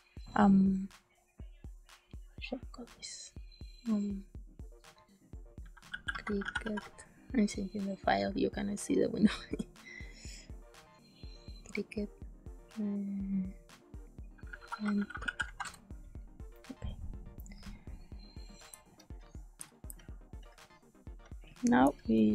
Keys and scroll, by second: 5.3-7.0 typing, 14.2-15.9 typing, 18.6 space, 19.8 space.